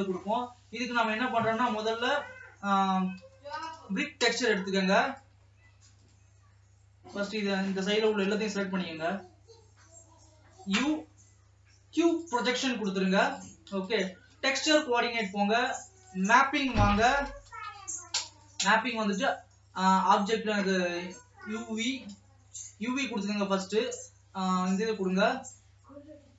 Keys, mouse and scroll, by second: 0.0 ctrl+s, 6.5 Tab, 8.2-9.2 l, 12.2 u, 13.6 click, 17.5 p, 20.0 click, 22.0 click, 24.4 click.